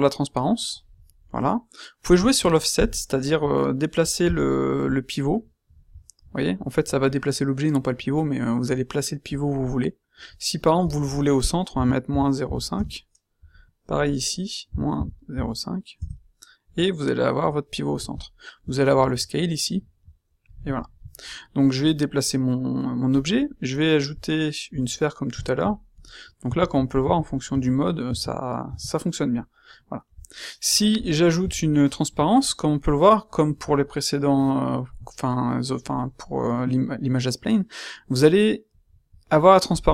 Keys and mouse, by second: 19.1-20.8 middle drag, 21.8-23.4 middle drag, 26.4-28.6 typing.